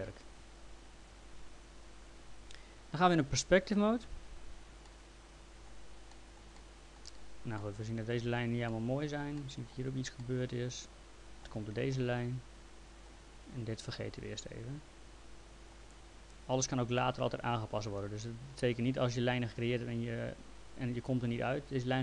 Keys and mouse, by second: 4.0 p, 4.9 alt+middle click, 6.1 middle click, 6.6 alt+middle click, 7.6 alt+middle click, 11.9 alt+middle click, 13.9 alt+middle click, 17.0 alt+middle click.